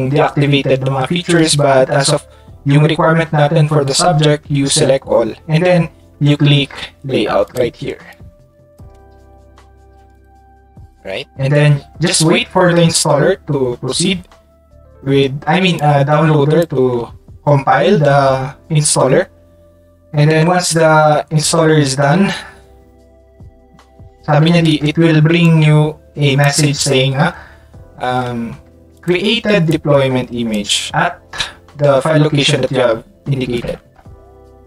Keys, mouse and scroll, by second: 7.4 click, 8.1 click, 10.1 click, 15.7-16.6 drag, 25.4-26.4 drag, 28.9 ctrl+click, 29.7 ctrl+click.